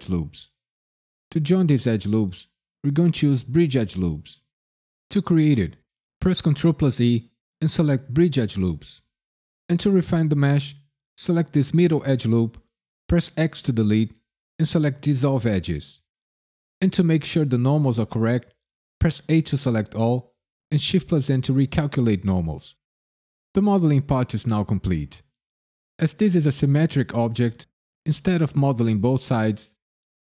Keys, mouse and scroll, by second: 6.4 ctrl+e, 11.0 alt+click, 11.3 alt+click, 13.3 x, 19.3 a, 20.6 shift+n.